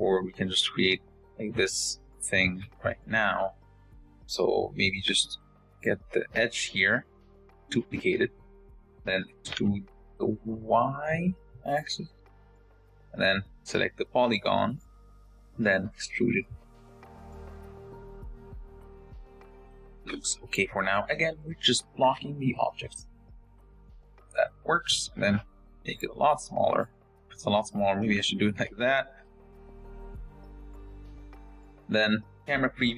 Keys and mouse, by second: 2.5 Tab, 3.1 click, 4.5 2, 5.2 click, 6.5 shift+d, 8.3 e, 11.5 click, 12.3 shift+click, 15.1 click, 15.4 click, 16.1 e, 17.3 click, 17.9 g, 18.3 s, 20.1 click, 20.8 click, 21.2 s, 22.3 click, 22.7 g, 24.1 Tab, 24.3-24.7 drag, 25.1 click, 25.9 s, 27.0 s, 28.0 middle click, 28.6 Tab, 28.6 g, 30.4 Tab, 30.6 click, 30.7 middle drag, 31.1 g, 32.5 KP_0.